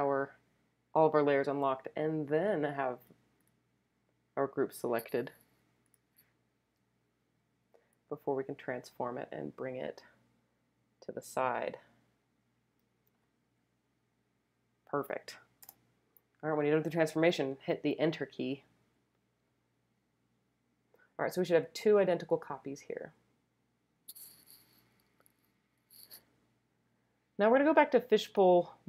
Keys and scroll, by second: 2.2 super+t, 6.7 super+t, 15.6 Return.